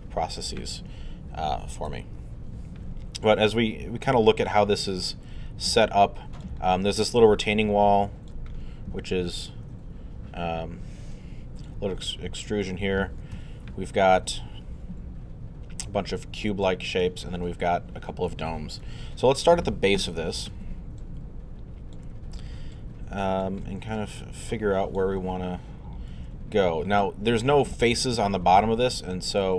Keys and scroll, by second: 1.9 1, 2.8 alt+i, 13.3 alt+1, 14.2 alt+1, 20.1 3.